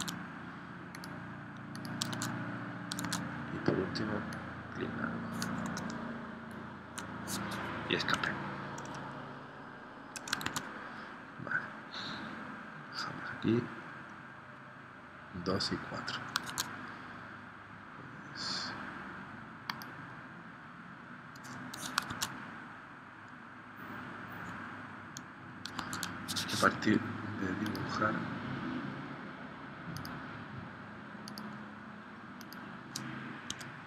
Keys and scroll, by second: 0.0 super+Tab, 2.1 super+Tab, 3.0 super+Tab, 8.1 Escape, 10.4 super+Tab, 16.5 super+Tab, 22.1 super+Tab, 25.7 super+Tab, 33.6 Escape.